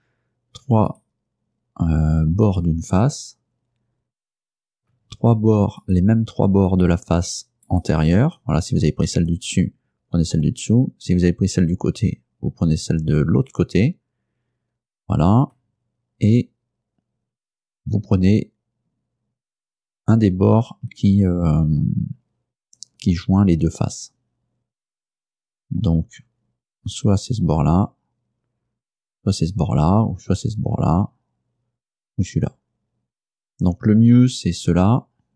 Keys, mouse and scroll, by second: 1.0 shift+right click, 2.5 shift+right click, 5.9 shift+right click, 6.8 shift+right click, 7.7 shift+right click.